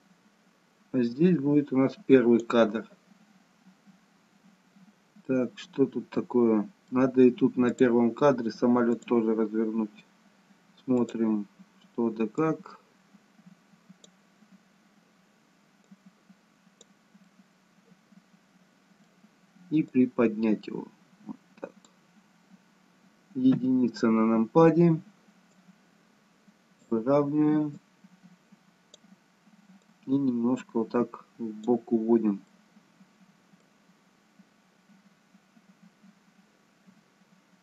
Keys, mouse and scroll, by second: 5.4 middle click, 7.7 click, 8.9 click, 11.0 click, 12.8 click, 15.8 click, 17.2 middle click, 19.9 click, 23.5 KP_1, 25.5 click, 27.8 click, 29.9 click, 32.6 middle click.